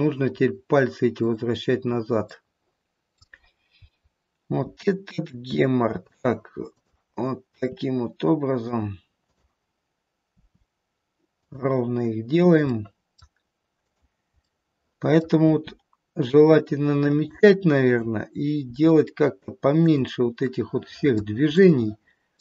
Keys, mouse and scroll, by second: 0.3-0.8 scroll up 2, 1.0 click, 2.3 middle click, 3.0 middle click, 3.8 scroll down 1, 4.6 r, 6.7 click, 7.6 r, 9.3 click, 10.7 r, 12.7 middle click, 13.7 click, 14.4 middle click, 15.3 r, 17.7 click, 18.6 r, 20.4 middle click, 20.5 middle click, 20.8 middle click, 21.0 middle click, 21.4 middle click.